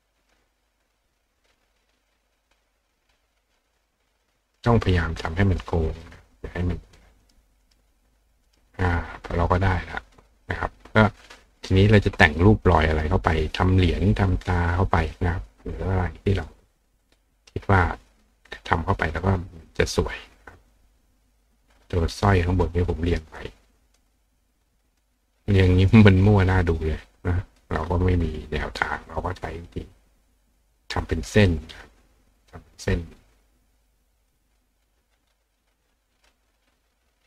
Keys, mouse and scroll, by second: 2.1-3.6 drag, 4.2 click, 5.5 click, 5.9 click, 6.9 click, 7.2 click, 7.2 right click, 7.6 right click, 8.5 right click, 9.3 click, 14.6 click, 16.4 click, 19.1 click, 19.7-20.7 drag, 21.4-22.6 drag, 23.4 click, 24.5 click, 26.6 click, 27.2 click, 30.0-31.5 drag, 34.2 click, 36.1 click.